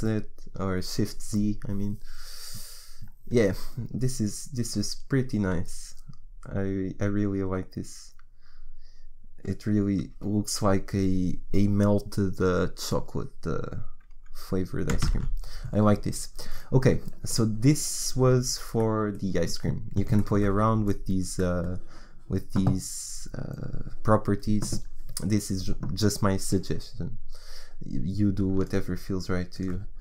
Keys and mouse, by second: 1.4 shift+z, 15.7 shift+z, 28.7-30.0 drag.